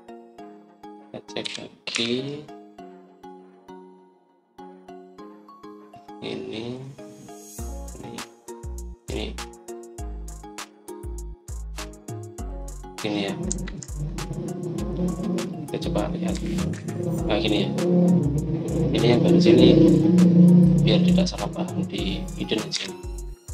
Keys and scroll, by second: 2.1-2.8 typing, 14.4 Escape, 14.5 Escape, 17.2-17.6 typing.